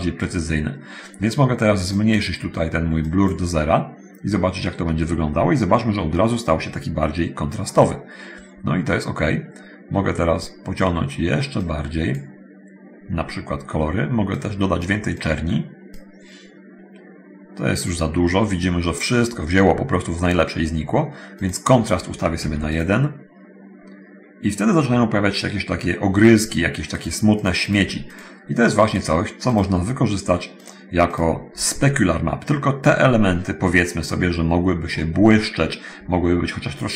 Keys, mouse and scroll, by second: 2.2 click, 3.2 click, 7.6-9.9 middle drag, 11.8 click, 14.6 click, 19.5-20.0 scroll up 1, 21.3 click, 22.6 1, 22.6 click, 27.2 click, 28.3 click, 28.8 click, 29.7 click, 30.8 click, 31.3 click, 34.0-34.5 scroll down 1, 34.8 click, 35.2 middle click.